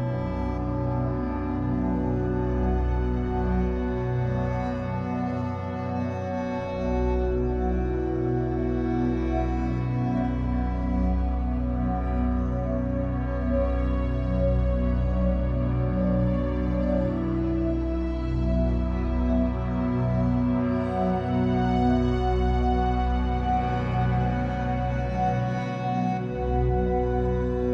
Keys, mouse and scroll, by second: 1.5 middle click, 2.3-5.7 drag, 5.7 middle click, 6.7-9.3 drag, 9.3-10.3 middle drag, 10.3-14.6 drag, 14.3-14.6 scroll down 2, 14.6-21.6 middle drag, 17.0-17.4 scroll up 2, 18.1-18.5 scroll down 2, 19.7-20.0 scroll up 2, 20.3 scroll up 2, 21.6-27.7 drag.